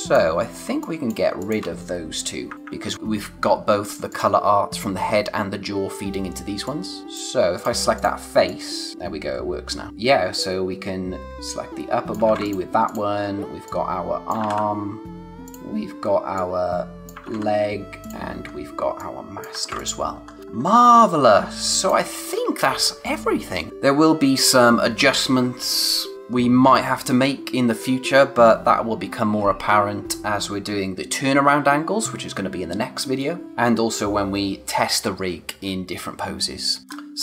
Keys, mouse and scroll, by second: 4.1 click, 6.6 click, 9.9 scroll up 1, 10.3 click, 12.2 ctrl+z, 12.4 click, 14.4 ctrl+z, 14.7-15.2 scroll down 1, 15.2 scroll up 1, 15.4 click, 17.2 ctrl+z, 18.0 click, 18.3 scroll down 1, 19.0 click, 19.6 ctrl+z, 19.8 click, 20.2-20.7 scroll down 2, 20.4 click, 20.7 space, 20.9 click, 21.2 space, 23.7 s, 36.8-37.2 scroll up 1.